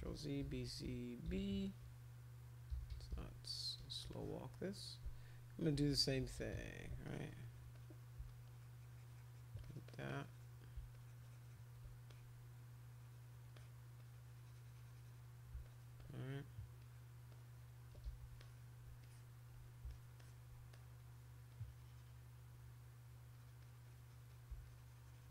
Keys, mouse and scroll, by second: 0.0 ctrl+z, 0.4 b, 1.3 b, 2.5-3.6 typing, 4.1 alt+click, 5.5-6.6 typing, 7.1 click, 7.4 click, 7.7 click, 8.2-9.4 shift+drag, 9.6 click, 9.9 click, 10.0 click, 10.9 shift+click, 12.1 click, 12.6 click, 13.5 click, 14.0-15.2 drag, 15.6 alt+click, 16.0 click, 16.8 click, 17.3 click, 18.1 ctrl+z, 18.4 click, 19.0 alt+click, 19.9 alt+click, 20.2 alt+click, 20.7 click, 21.5 click, 23.3 click, 23.6 click, 23.8 click, 24.1 click, 24.3 click, 24.6 shift+click.